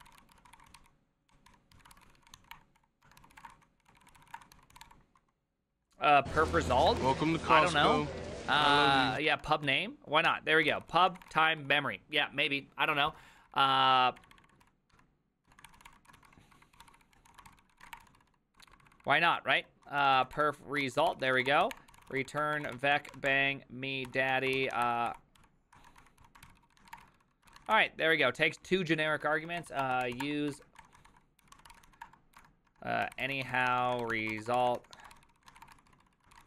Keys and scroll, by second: 0.0-12.0 typing, 10.3 Tab, 10.7 ctrl+c, 13.0-30.7 typing.